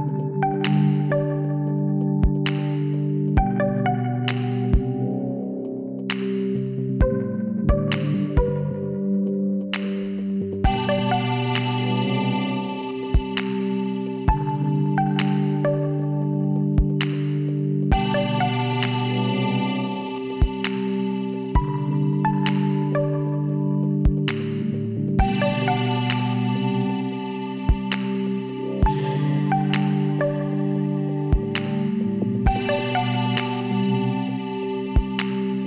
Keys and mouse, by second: 2.6 middle click, 4.1 middle click, 7.0-9.7 drag, 8.9 e, 12.3 s, 15.9-17.7 drag, 17.3 KP_1, 17.7 middle click, 21.0-22.8 drag, 26.0 s, 28.4 e, 32.9 s.